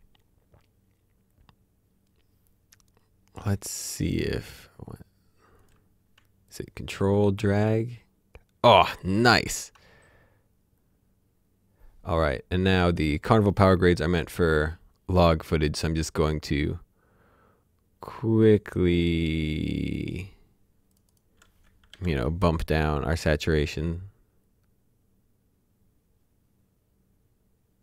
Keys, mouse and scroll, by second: 2.6 scroll down 1, 3.6 click, 4.2 scroll down 1, 4.4-5.6 scroll up 1, 5.6 click, 6.6-11.1 drag, 12.9 click, 14.1 ctrl+click, 18.7 click, 21.9 s, 23.3 click.